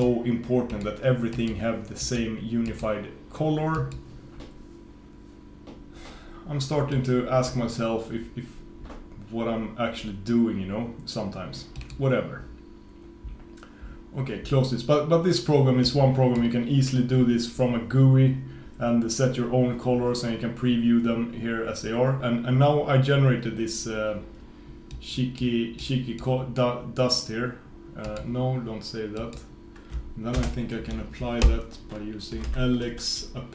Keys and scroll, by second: 30.5 super+space.